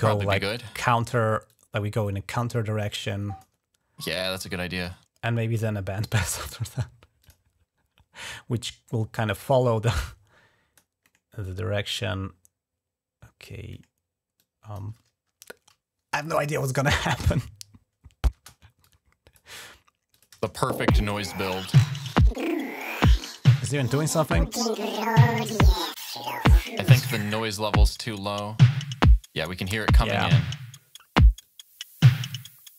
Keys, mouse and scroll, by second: 0.3 click, 1.3-3.2 drag, 3.9 click, 4.4 click, 4.6 click, 7.0 click, 8.9-10.6 drag, 11.2-13.3 drag, 14.2 click, 14.8 click, 16.8 click, 17.1 space, 18.1 space, 18.6 click, 19.2 click, 19.2-20.1 typing, 19.9 click, 21.9-23.2 drag, 31.2 click.